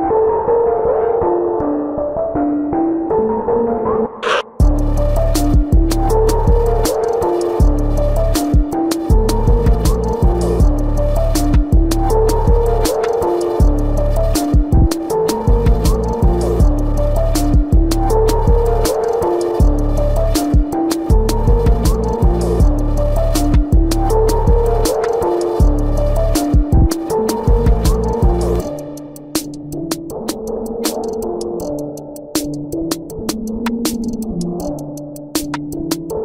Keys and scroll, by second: 2.1 space, 5.9 ctrl+alt+z, 6.9 ctrl+alt+z, 17.8 ], 19.1 ], 20.3 ], 22.6 ctrl+-, 22.9 space, 23.4 ], 25.6 ], 27.0 ], 27.5 ctrl+-, 29.4 ], 30.8 space, 34.3 ctrl+alt+z.